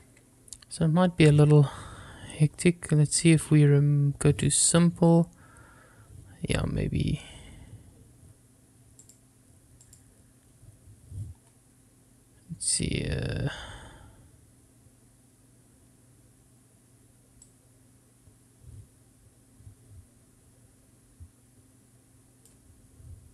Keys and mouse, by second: 5.7 click, 10.3 click, 11.1 click, 18.7-23.3 drag.